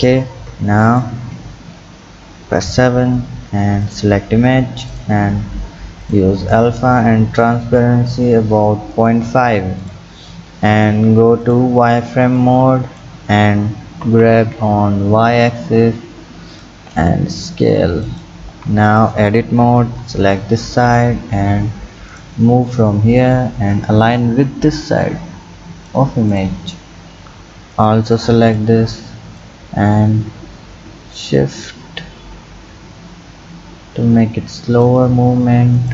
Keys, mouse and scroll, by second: 0.9 click, 2.5 KP_7, 3.8 click, 4.9 click, 6.0 click, 6.6-9.1 drag, 9.8 click, 11.4 click, 12.4-14.0 drag, 14.0 g, 16.9 s, 18.5 Tab, 18.9 click, 19.8 b, 22.1 click, 23.4-26.4 drag, 27.4 b, 29.4-32.4 drag, 35.7 click.